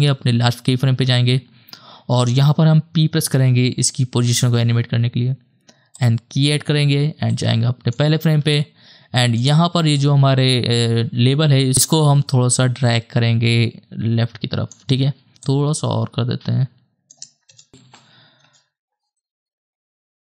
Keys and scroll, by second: 3.2 p, 8.5 space, 17.5 shift+KP_0, 17.8 shift+/, 18.4 KP_0.